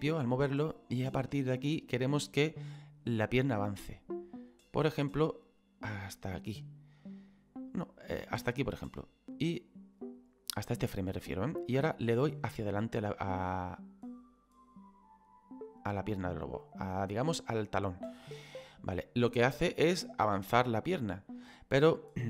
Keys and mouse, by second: 7.3 click, 12.0 click, 18.9 click.